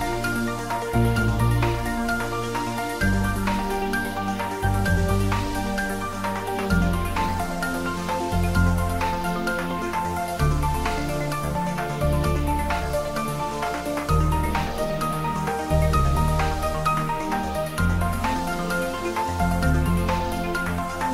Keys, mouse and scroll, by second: 0.7 Tab, 1.3 click, 3.3 scroll down 1, 4.5 click, 6.1 Tab, 6.9 s, 7.4 click, 8.1 s, 10.8 click, 12.9-13.6 ctrl+middle drag, 14.5-15.6 drag, 17.9-18.5 drag.